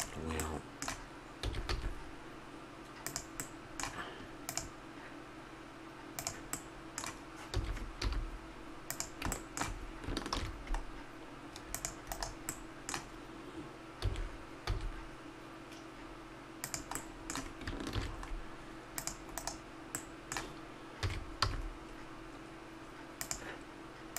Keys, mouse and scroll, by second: 0.4-2.4 middle drag, 1.4 s, 3.4-4.5 middle drag, 6.5-8.8 middle drag, 7.5 s, 9.3-10.8 middle drag, 10.2 ctrl+r, 14.0 s, 17.1-18.9 middle drag, 17.9 ctrl+r, 19.9-21.8 middle drag, 21.0 s.